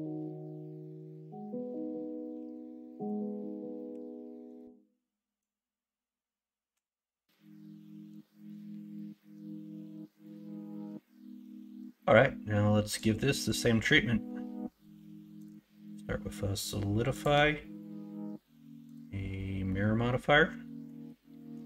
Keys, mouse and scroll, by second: 1.7 x, 2.3 x, 3.9 2, 5.3-6.9 drag, 9.0 scroll up 1, 9.2 middle click, 9.3 scroll down 1, 9.9 middle click, 11.2 scroll up 1, 11.4 scroll down 1, 19.6-20.8 middle drag.